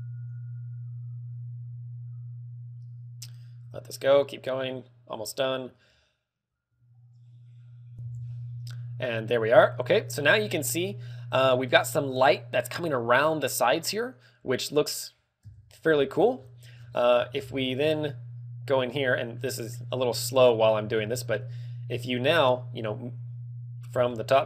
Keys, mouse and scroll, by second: 15.7 KP_7, 16.1 KP_7, 17.1-18.0 scroll down 5, 18.2 shift+middle click, 20.6 scroll down 3, 21.2 shift+middle click, 21.7 shift+middle click, 24.0 scroll down 3, 24.3 shift+middle click.